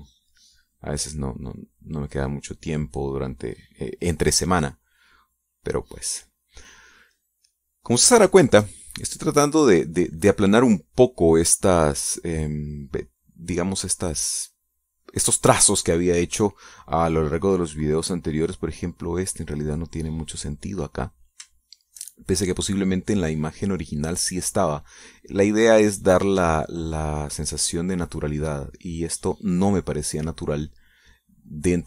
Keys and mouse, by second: 6.0-7.3 drag, 7.4 middle click, 7.6 click, 7.9 middle click, 9.2 shift+click, 9.6 shift+middle click, 9.7-16.8 shift+drag, 17.1 middle click, 17.3 click, 18.7-22.0 drag, 22.5 shift+click, 23.0 shift+middle click, 23.6-24.7 shift+drag, 24.8 middle click, 25.2 middle click, 25.9 middle click, 27.5-31.8 drag.